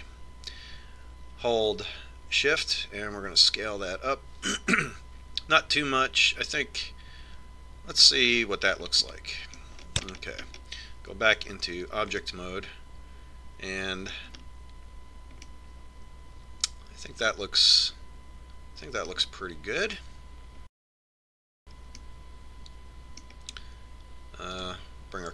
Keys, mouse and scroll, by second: 11.0-13.4 middle drag, 13.4 Tab, 14.9 middle click, 15.2 middle click, 16.2-19.1 middle drag, 23.0-24.7 middle drag.